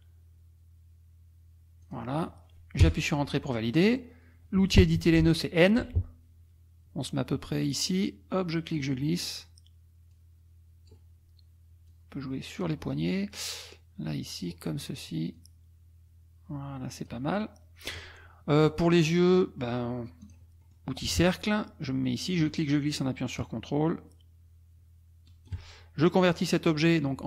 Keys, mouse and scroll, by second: 1.8 click, 2.8 Return, 5.8 n, 7.8 click, 10.1 click, 11.9 click, 13.6 click, 15.3-17.2 drag, 17.4 middle click, 18.6 middle click, 20.2 click, 20.6 middle click, 20.8 click, 22.2-25.7 drag.